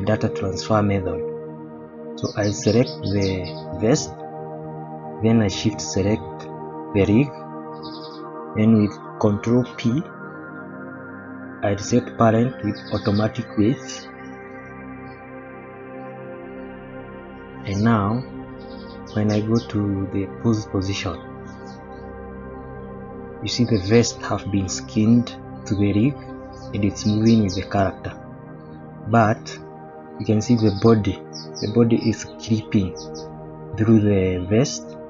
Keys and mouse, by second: 0.9 middle click, 3.5 middle click, 6.2 shift+click, 7.9 shift+middle click, 9.7 ctrl+p, 16.7 shift+middle click, 17.2 middle click, 18.6 click, 21.1 click, 22.6-23.3 middle drag, 23.7-24.2 middle drag, 24.6-25.2 middle drag, 26.8-27.6 middle drag, 28.4-28.7 shift+middle drag, 29.6-30.0 middle drag, 32.9-33.3 middle drag, 33.5-34.0 middle drag, 34.3-35.0 middle drag.